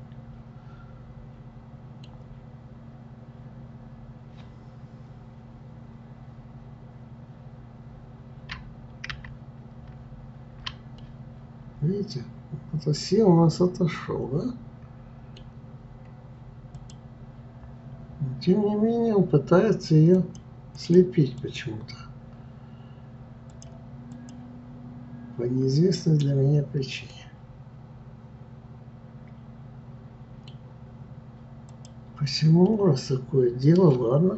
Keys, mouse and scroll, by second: 9.1 ctrl+z, 10.0 ctrl+z, 11.0-14.0 middle drag, 16.7 click, 20.1 click, 20.7 click, 21.4 click, 23.5 click, 24.1 click, 27.1-30.1 middle drag, 31.7-32.6 drag, 32.6-34.3 middle drag.